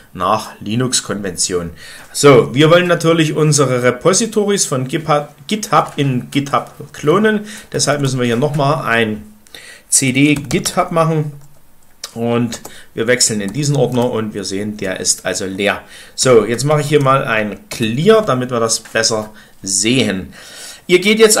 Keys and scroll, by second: 7.6-8.3 typing, 10.1-10.8 typing, 12.5 Return, 13.1-13.9 typing, 15.9-17.6 typing, 17.6 Return.